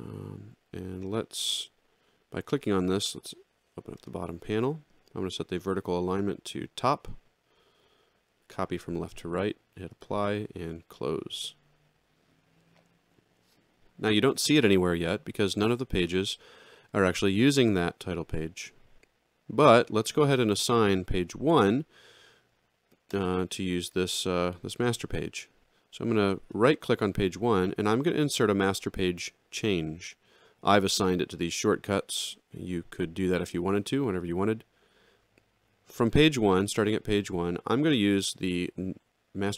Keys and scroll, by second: 3.1 ctrl+8.